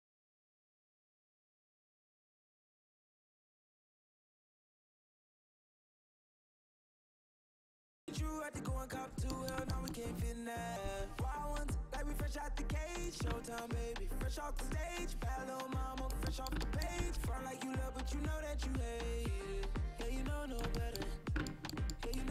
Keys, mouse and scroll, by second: 3.4 middle click, 4.6 middle click, 4.8 middle click, 5.6 a, 6.2 c, 10.8 c, 17.0 c.